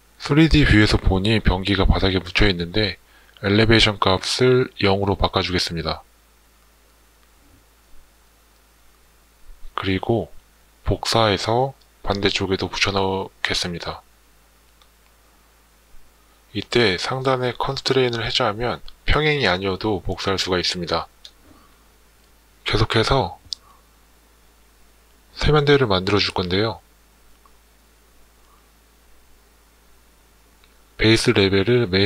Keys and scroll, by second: 3.8 0, 4.6 Return.